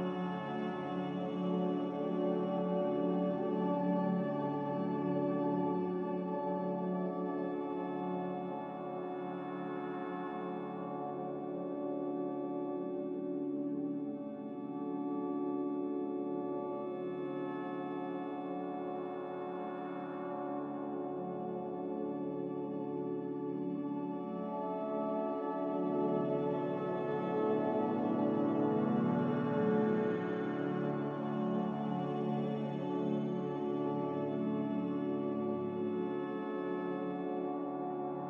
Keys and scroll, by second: 4.2 b, 5.4 Delete, 7.0 Delete, 9.0 g, 14.6 z, 37.7 n.